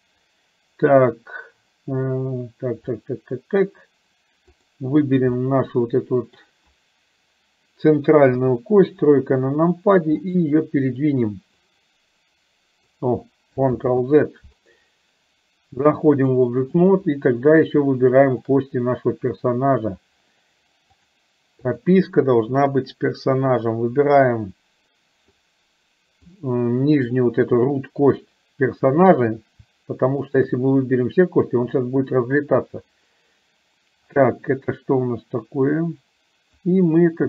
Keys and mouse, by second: 3.0 middle click, 4.6 click, 5.5-6.5 middle drag, 8.4 KP_3, 11.8-13.0 drag, 13.9 ctrl+z, 16.1 click, 18.5 shift+click, 21.0-22.1 drag, 26.3 click, 30.4 shift+click, 36.6-37.2 drag.